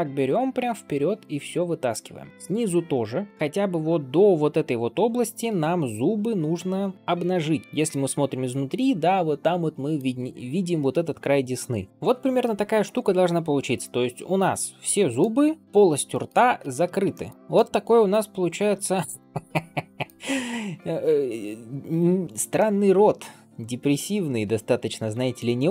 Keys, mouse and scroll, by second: 0.4 g, 1.7 click, 2.2 g, 2.3 middle click, 3.3 d, 3.3-5.2 drag, 5.2 d, 5.3 d, 7.1 middle click, 7.8-9.0 scroll up 4, 8.3-9.9 middle drag, 10.0 scroll down 2, 11.0 scroll down 1, 11.8 d, 11.9-12.3 scroll down 1, 12.3-15.1 middle drag, 16.0 middle click, 16.5 alt+shift+z, 17.0 shift+middle click, 17.3 scroll up 1, 17.4 middle click, 18.9 shift+middle click, 19.2 middle click, 20.1-20.6 scroll down 2, 21.1-22.0 scroll up 2, 22.4-25.3 middle drag.